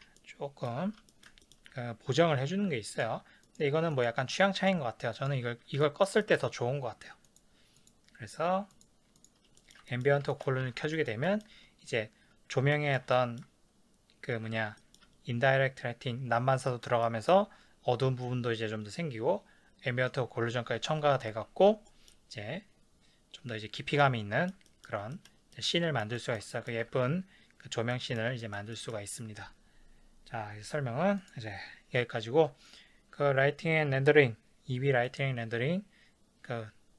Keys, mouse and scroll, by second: 0.2-3.0 shift+middle drag, 3.5 click, 4.0 click, 4.6 click, 5.2 click, 5.8-7.3 shift+middle drag, 7.3 click, 7.8 click, 8.8 click, 9.2 click, 9.6-25.1 shift+middle drag, 10.7 ctrl+s, 26.9 ctrl+s, 27.9 middle click, 28.5-31.2 ctrl+middle drag, 31.2 click.